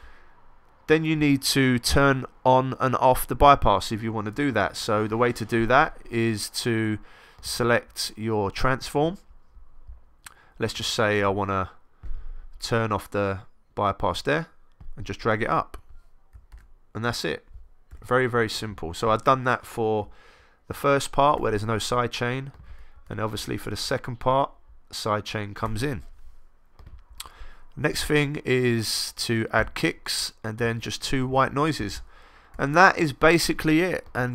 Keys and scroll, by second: 4.5 super+Down, 16.5 super+z, 17.9 1, 22.9 super+Up, 32.5 x.